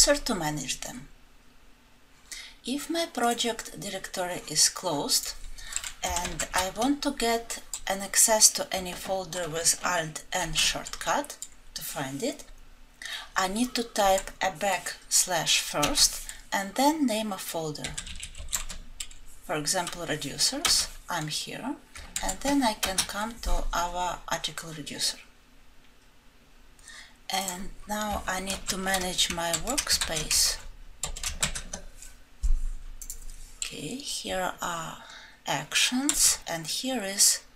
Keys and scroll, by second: 6.2 ctrl+shift+F12, 10.5 ctrl+shift+n, 28.6 ctrl+shift+F12, 29.5 ctrl+shift+F12, 29.5 alt+Left, 36.1 alt+Right.